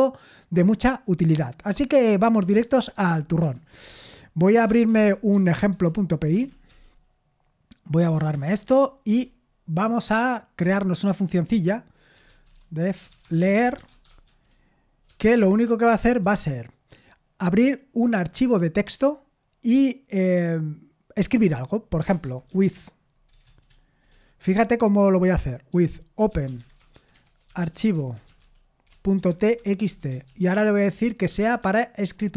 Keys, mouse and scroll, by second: 2.9 super+l, 3.4 super+l, 4.3-6.2 typing, 6.4 Right, 6.7 Return, 8.0-9.1 typing, 11.9-15.5 typing, 15.8 Return, 21.8-30.8 typing, 31.8-32.3 typing.